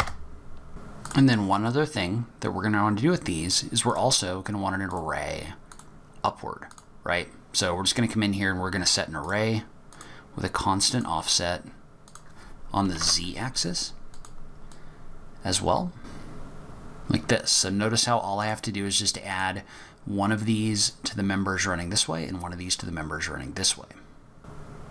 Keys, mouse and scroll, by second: 1.0 click, 3.8 click, 4.8 click, 5.7 click, 9.2 click, 9.9 click, 10.9 click, 12.1 click, 14.7 click, 16.9 click, 18.4 click, 24.8 click.